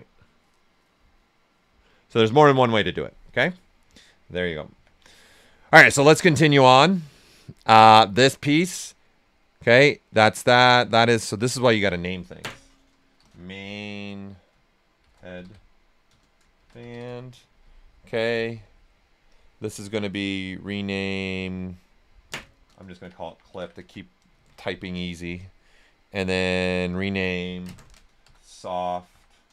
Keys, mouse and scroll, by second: 4.7-5.1 typing, 5.1 right click, 5.8-7.9 drag, 11.4 click, 13.1 shift+m, 13.5 i, 13.6 space, 14.7-17.3 typing, 22.7-24.0 typing, 22.7 click, 25.3 click, 27.9-29.5 typing.